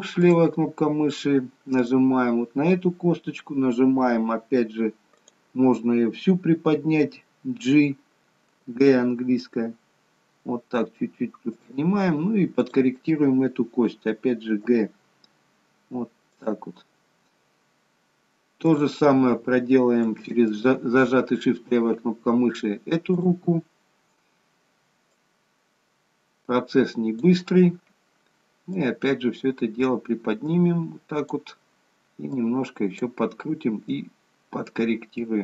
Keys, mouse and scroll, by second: 0.3 click, 1.9 click, 12.7 click, 14.7 g, 18.7 click, 20.5 shift+click, 23.3 click, 25.0 click, 28.8 click, 32.5 click, 34.0 click.